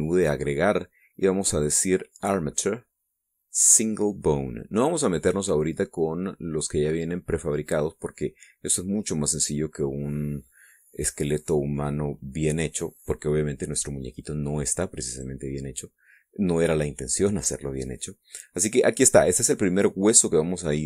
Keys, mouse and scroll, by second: 15.7 click.